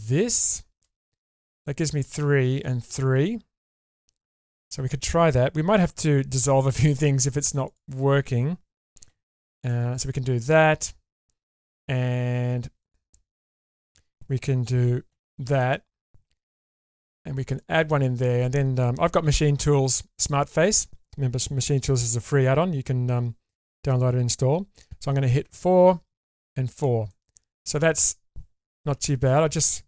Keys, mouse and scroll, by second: 5.8 2, 6.7 click, 7.7 shift+click, 9.1 f, 9.4 click, 9.7 middle click, 12.8 click, 13.7 shift+click, 15.1 f, 15.6 middle click, 16.9 ctrl+r, 18.1 click, 19.2 1, 20.1 click, 25.5 4, 26.2 4, 26.7 click, 27.1 middle click, 28.9 2, 29.3 click.